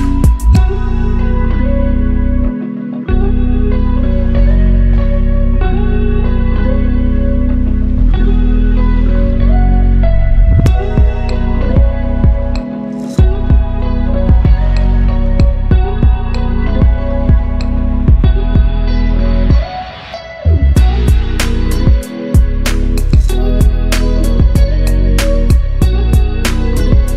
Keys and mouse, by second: 1.2 click, 1.2 right click, 3.4-4.5 drag, 5.2 click, 14.5 click, 15.3 shift+a, 24.2 click, 25.7 drag.